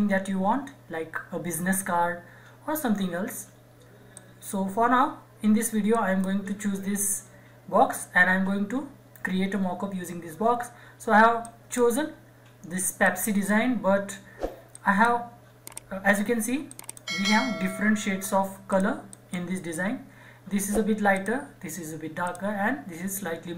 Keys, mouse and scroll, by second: 4.1-5.9 drag, 7.2 scroll up 1, 8.7-9.3 scroll down 1, 11.4-23.5 drag.